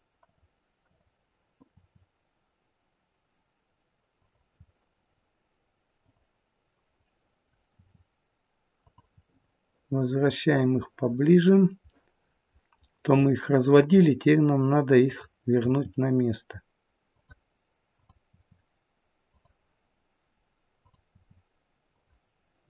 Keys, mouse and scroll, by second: 0.8 click, 1.5 r, 4.5 middle click, 5.9 click, 7.0 middle click, 7.7 r, 9.2 middle click, 11.8 middle click, 15.0 middle click, 15.0 click, 15.7 r, 17.9 click, 18.4 r, 20.8 click, 21.3 r.